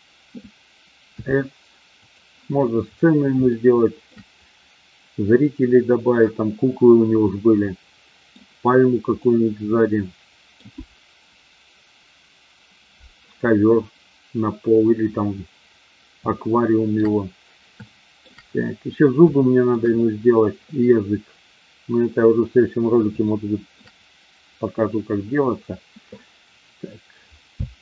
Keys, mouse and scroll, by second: 1.0 s, 2.0 click, 3.5 scroll up 1, 3.7-4.1 shift+middle drag, 7.4 scroll up 1, 7.5 middle click, 9.2-10.8 middle drag, 16.4-17.1 shift+middle drag, 17.9-18.3 shift+middle drag, 19.4-19.7 shift+middle drag, 23.3-23.8 shift+middle drag, 27.6 space.